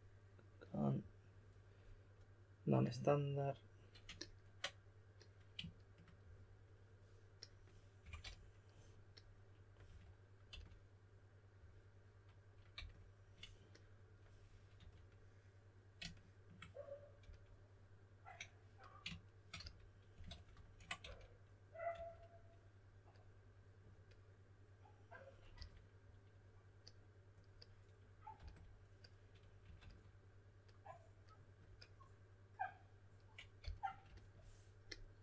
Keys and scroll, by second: 7.7-8.7 typing, 9.8-10.5 typing, 12.7 typing, 14.7 typing, 17.2 shift+s, 19.5 shift+s, 20.5 super+z, 21.0-22.4 typing, 25.5 typing, 28.4 typing, 29.6 typing, 33.6 s.